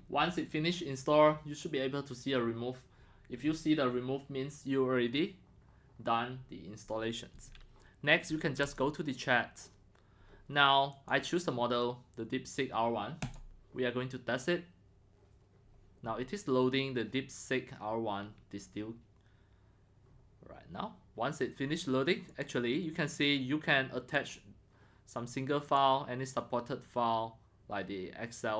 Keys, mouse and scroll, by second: 8.6 click, 10.9 click, 13.2 click, 18.4 click, 22.4-23.4 drag, 24.1 click, 24.5-24.9 drag, 25.6 click.